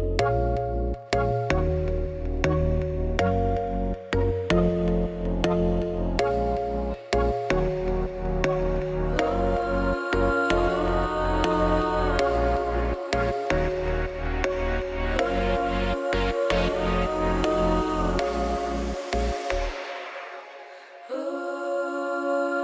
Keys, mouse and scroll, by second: 0.0 ctrl+click, 0.7 z, 0.8 middle click, 1.1 click, 1.6 middle click, 1.9 ctrl+click, 2.0-3.3 middle drag, 3.3 alt+e, 5.2 middle click, 5.5 click, 6.1 x, 6.3 click, 6.6 x, 6.8 click, 7.0 x, 8.3 click, 8.5 f, 9.0 middle click, 9.2 ctrl+r, 10.2 KP_1, 10.5 g, 10.9 middle click, 11.1 3, 12.0 z, 12.2 click, 12.6 middle click, 13.2 ctrl+click, 13.6 middle click, 14.1 KP_1, 15.0 alt+e, 16.1 Tab, 16.3 middle click, 17.1 ctrl+2, 17.8 middle click, 18.7 Tab, 18.9 middle click, 19.1 ctrl+r, 20.3 ctrl+r, 22.0 middle click, 22.4 ctrl+z.